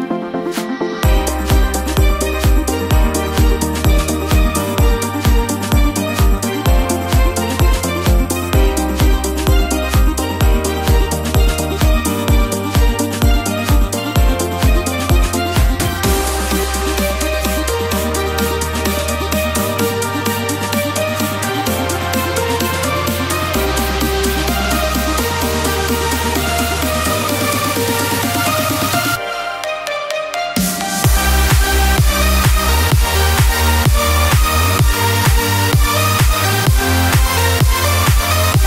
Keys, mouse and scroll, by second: 24.5 click, 24.7 1, 25.9 click, 29.3 ctrl+d, 33.0 click, 36.6 click, 37.9-38.6 scroll.